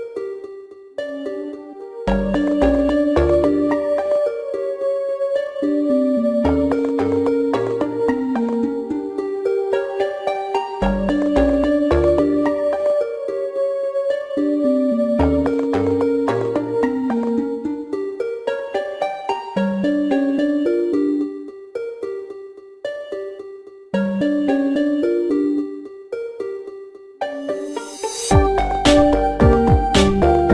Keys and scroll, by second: 0.0-1.4 typing, 6.0 -, 21.7 g, 21.8 Return, 22.2 ctrl+d, 22.4 l, 22.6 Return.